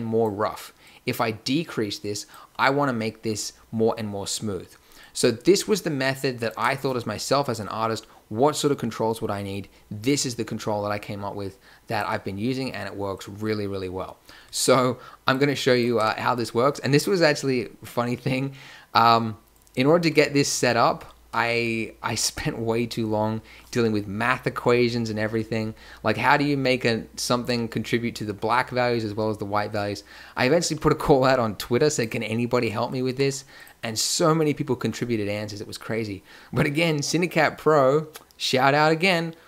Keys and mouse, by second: 0.8 middle click, 11.1 middle click, 13.1 click, 15.7 click, 16.0 Tab, 19.5-20.2 drag, 30.6 a, 31.9-33.0 drag, 33.0 g, 34.7 a.